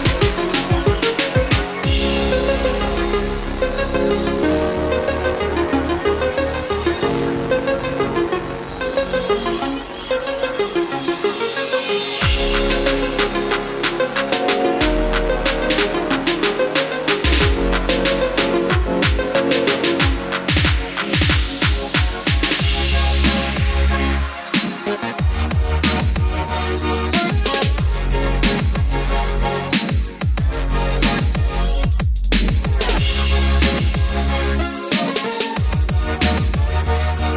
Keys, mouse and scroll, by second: 0.2 F4, 2.0-6.5 drag, 20.5-22.5 scroll up 1, 22.5-23.8 drag, 23.8-34.9 drag, 35.1 Escape, 35.7-36.3 scroll up 1, 36.3 scroll down 1.